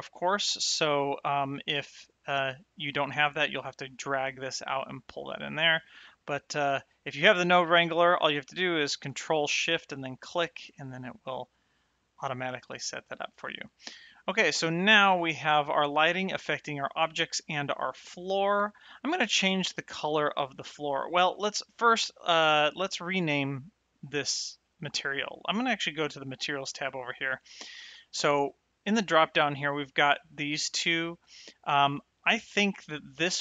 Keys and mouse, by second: 1.8 click, 3.1 click, 5.4 click, 7.8 click, 10.1 ctrl+shift+click, 14.0 shift+middle click, 14.6 middle click, 15.2 shift+middle click, 17.6 shift+middle click, 26.2 click, 28.7 click, 33.2 click.